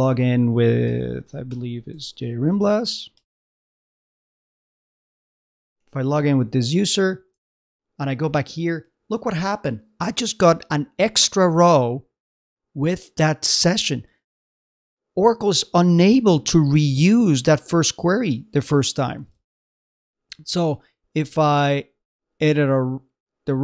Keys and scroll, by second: 7.5 super+Tab, 19.5 super+Tab.